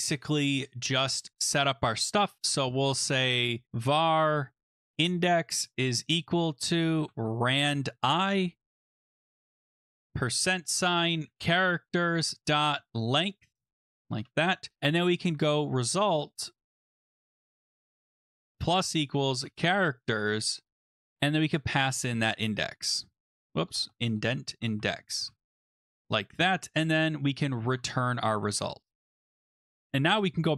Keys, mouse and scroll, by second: 1.2 click, 1.9 click, 3.4-5.4 typing, 6.7-7.7 typing, 8.0 Tab, 8.7 Right, 9.6-15.6 typing, 16.9-28.9 typing, 23.1 Tab, 26.0 Return, 29.2 Tab, 30.0 click.